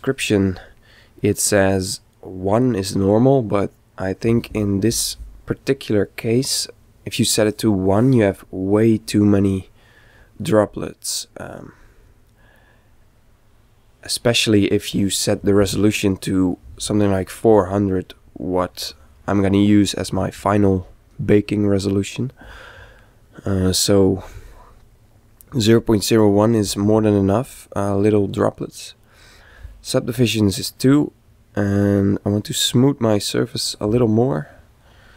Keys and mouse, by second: 9.2-11.0 middle drag, 12.5-14.4 middle drag, 21.4-23.3 middle drag, 27.4-32.3 middle drag, 32.3 click.